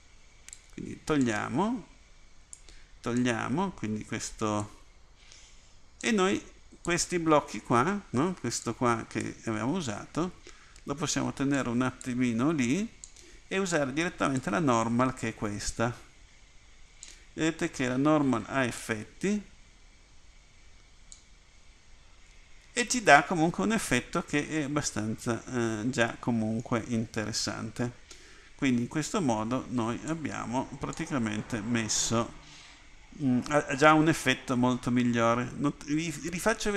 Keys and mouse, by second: 4.8-6.1 drag, 7.1 click, 19.0-20.1 drag, 30.2-34.5 drag.